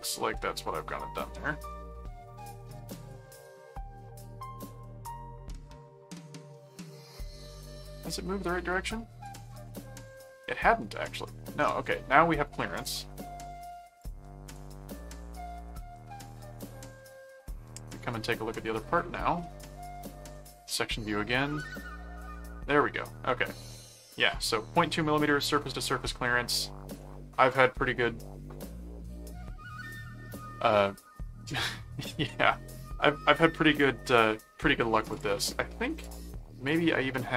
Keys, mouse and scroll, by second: 2.4 middle click, 3.6 middle click, 5.1 middle click, 9.2 click, 11.2 middle click, 12.7 click, 14.0 click, 14.4 ctrl+s, 15.7 ctrl+middle click, 16.7 ctrl+Tab, 19.8 click, 21.5 click, 23.2 middle click, 25.3 middle click, 27.0 middle click, 35.1 click, 36.0 click, 36.6 click.